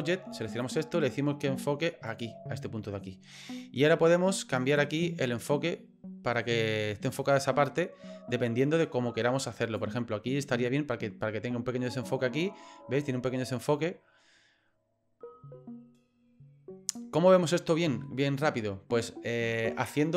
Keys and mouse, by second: 0.6 click, 4.9-9.7 drag, 13.7-17.0 drag.